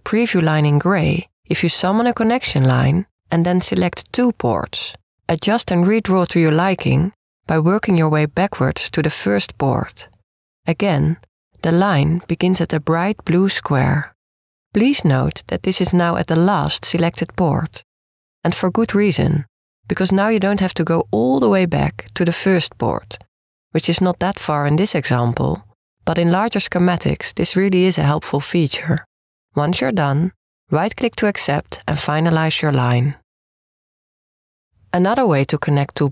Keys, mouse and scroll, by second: 1.6-3.2 drag, 4.9-6.4 drag, 10.3-12.1 drag, 32.4-34.3 right drag.